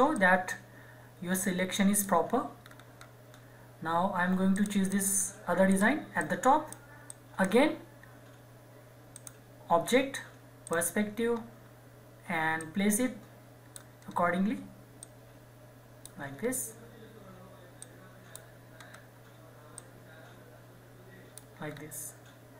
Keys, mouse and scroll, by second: 0.1-2.6 drag, 2.6 scroll down 1, 4.5 click, 5.2-5.7 scroll down 1, 5.7-9.1 drag, 11.3 scroll up 1, 12.6 click, 12.6-14.0 drag, 14.0 scroll up 1, 15.0 click, 15.0-16.3 drag, 16.3-17.8 scroll down 1, 17.8 click, 18.7 scroll up 1, 19.8-21.7 drag, 21.7 scroll down 1.